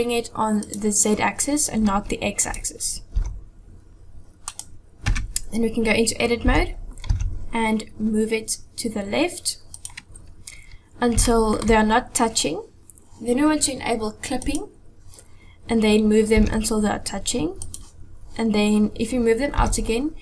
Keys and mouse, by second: 0.7 click, 2.5 click, 3.2 g, 5.1 Tab, 6.5 a, 7.1 g, 11.3 shift+click, 14.5 click, 16.4 g, 19.6 g.